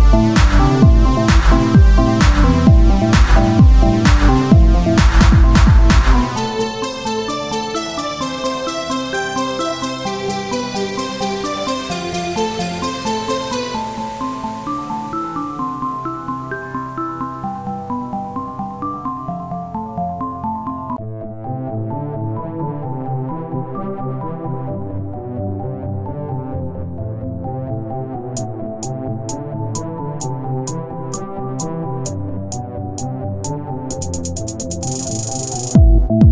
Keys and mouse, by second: 0.3 c, 1.1 b, 2.5 x, 4.6-6.4 drag, 6.4 z, 8.6-10.1 drag, 10.1 ctrl+r, 12.1 KP_1, 12.7 z, 13.1 c, 14.7 s, 16.0 ctrl+z, 18.9 s, 20.6 z, 21.9 KP_1, 22.4-24.3 z, 26.5 s, 29.9 click, 30.4 z, 31.9 Tab, 32.1 Tab, 32.9 ctrl+Tab, 33.7 z, 35.2 click.